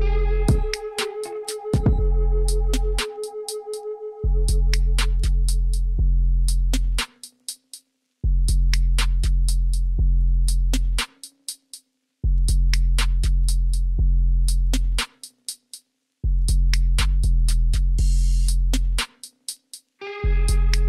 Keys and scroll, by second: 5.9 Tab, 10.8 2, 12.2 s, 16.7 Tab.